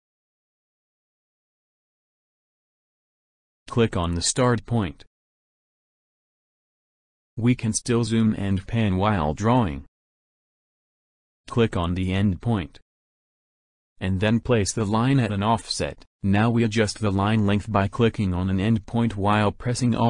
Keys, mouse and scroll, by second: 0.4 scroll up 2, 0.5-2.1 middle drag, 2.4-3.4 ctrl+scroll up 6, 4.0 ctrl+scroll up 2, 6.6 click, 8.2 ctrl+middle click, 8.5 ctrl+middle click, 9.0 ctrl+middle click, 9.4-10.6 middle drag, 13.0 click, 16.3 click, 19.4 alt+click.